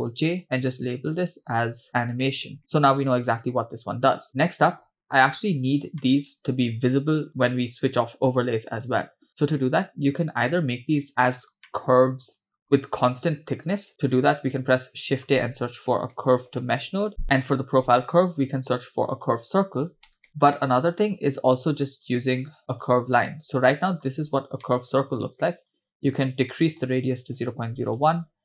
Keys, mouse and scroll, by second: 0.2 ctrl+j, 1.1-2.6 drag, 4.8-6.0 scroll down 4, 6.0 middle click, 7.3 click, 8.8 click, 11.7 middle click, 12.4 click, 12.6-13.9 scroll down 2, 14.1 shift+a, 18.2 shift+a, 21.8 click, 22.6 click, 24.0-24.5 scroll up 2, 24.6 shift+middle click, 25.6-28.2 drag.